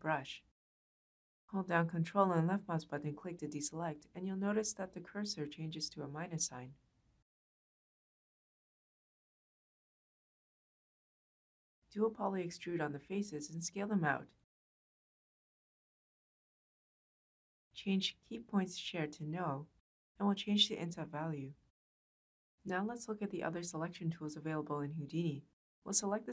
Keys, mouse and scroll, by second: 2.7 ctrl+click, 5.1-5.9 ctrl+drag, 8.4-9.1 ctrl+drag, 10.0 ctrl+click, 20.6-22.8 middle drag.